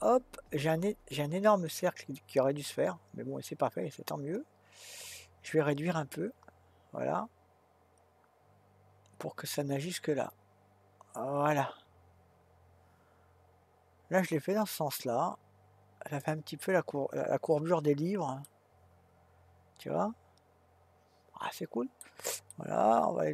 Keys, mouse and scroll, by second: 18.4-21.6 middle drag, 22.5-23.3 middle drag.